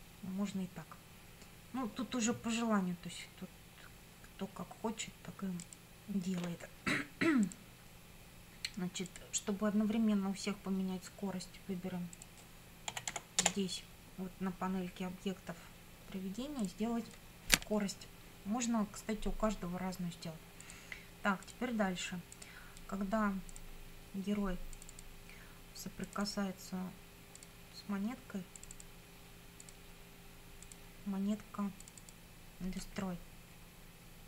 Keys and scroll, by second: 12.6-13.6 typing.